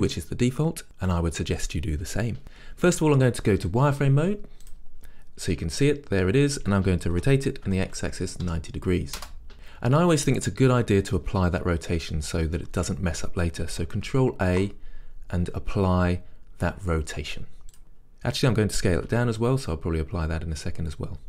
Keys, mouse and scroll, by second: 2.4 z, 7.2 r, 17.8 ctrl+a, 19.2 s.